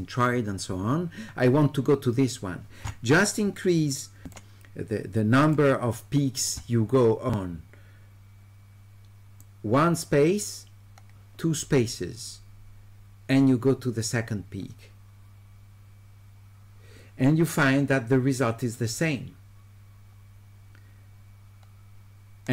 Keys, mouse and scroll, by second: 4.3 click, 5.4 click, 9.4-22.5 drag.